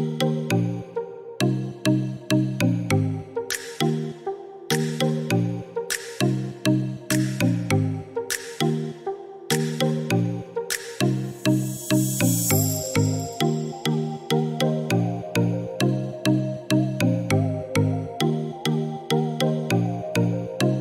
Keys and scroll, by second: 3.6 1, 4.0 7, 5.1 5, 5.4 Return, 11.5-13.3 typing, 13.6 Return.